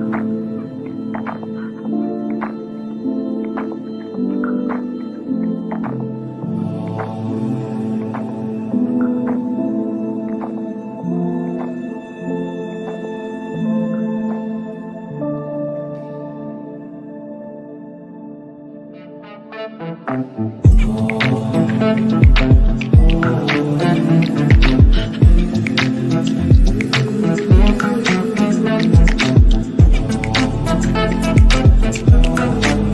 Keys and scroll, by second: 26.0 b.